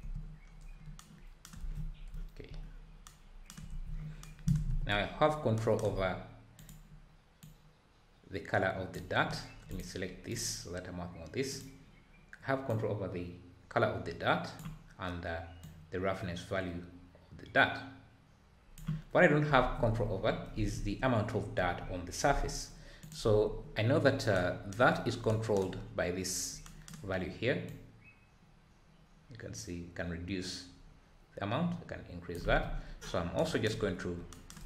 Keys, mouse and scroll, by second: 0.4-1.0 scroll down 3, 1.6 ctrl+s, 2.1 `, 2.6-3.1 scroll up 3, 3.7 ctrl+s, 4.7 n, 7.4 click, 9.8 click, 10.3 click, 11.9 click, 15.6-19.2 drag, 19.2-19.9 scroll down 2, 19.9 `, 27.8-30.7 drag, 32.4 ctrl+z, 32.7-34.6 scroll down 1.